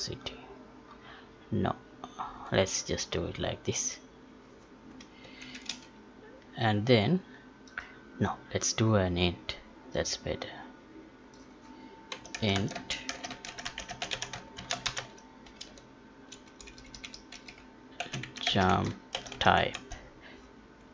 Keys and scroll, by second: 12.7 space.